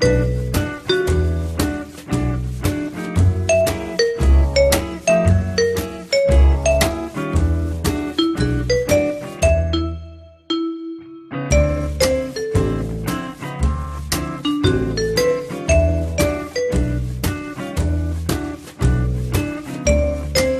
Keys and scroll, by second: 19.5 p.